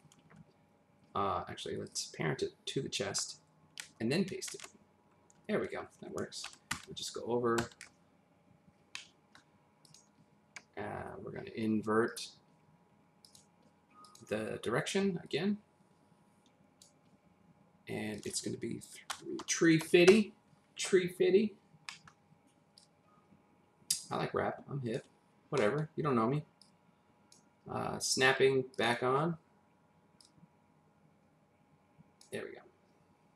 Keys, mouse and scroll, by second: 1.9 click, 6.7 shift+Right, 8.9 middle click, 9.8 click, 12.1 click, 13.2 click, 14.0 click, 15.2 click, 15.5 click, 18.6 click, 19.1-19.8 typing, 20.1 Return, 21.5-21.9 scroll up 1, 21.9 middle click, 22.8 click, 25.2-25.6 scroll up 1, 25.6 middle click, 26.6 click, 28.7 click, 29.2 scroll up 1, 30.2 click, 32.5-33.3 scroll down 1.